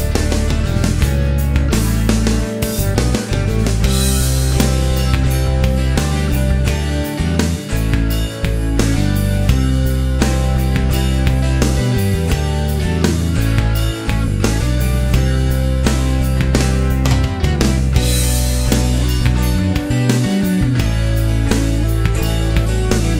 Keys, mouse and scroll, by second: 1.0 click, 1.6 middle click, 2.4 shift+v, 8.3-8.8 scroll up 2, 10.7-12.1 typing, 12.6 Return, 15.4 click, 16.5 scroll down 2, 16.7-18.1 middle drag, 19.1 click, 19.9 click, 21.2 click, 22.3 click.